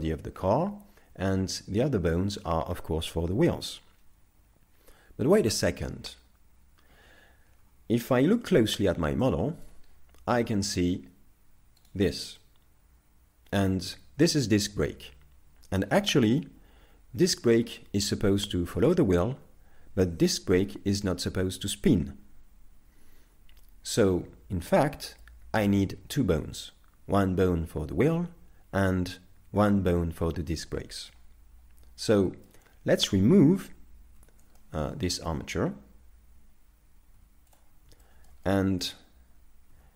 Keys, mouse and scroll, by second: 6.9 z, 8.4 shift+middle click, 9.3 middle click, 9.9-10.3 scroll up 3, 10.5 shift+middle click, 11.0-11.7 scroll up 2, 12.0 right click, 12.4 middle click, 30.2 middle click, 31.4-32.1 scroll down 1, 32.1 middle click, 33.2 right click, 34.2 z, 34.6 shift+middle click, 35.0 scroll down 3, 37.2 x, 38.0 shift+middle click, 38.6 middle click, 39.7 z.